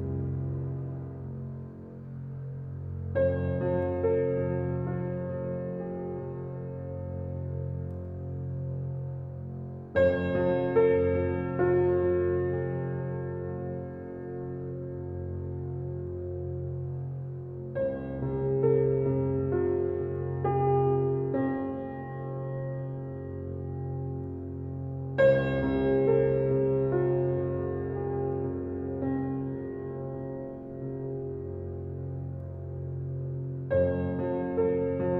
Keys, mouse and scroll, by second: 15.6 scroll up 1, 16.0-16.7 scroll down 1, 16.9 ctrl+s, 17.9-18.3 scroll up 1, 18.7-19.1 scroll down 1, 19.1 ctrl+s, 19.7 scroll up 1, 20.3-21.0 scroll down 1, 21.1-21.8 scroll up 1, 22.6-23.4 scroll down 1, 23.7-24.2 scroll up 1, 24.2-24.6 scroll down 1, 29.1-29.5 scroll up 1, 32.7-34.1 scroll down 1, 34.1-34.5 scroll down 1.